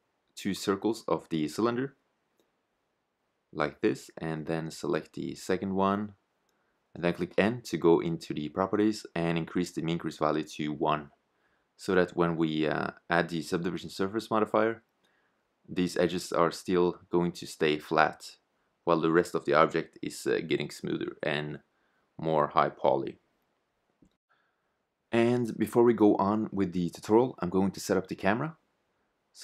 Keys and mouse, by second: 0.9 a, 4.7 ctrl+z, 7.3 n, 9.4 Tab, 15.7-18.2 middle drag, 18.2 shift+z, 21.7 shift+z, 23.3 z, 27.5 KP_0, 28.9-29.4 right drag.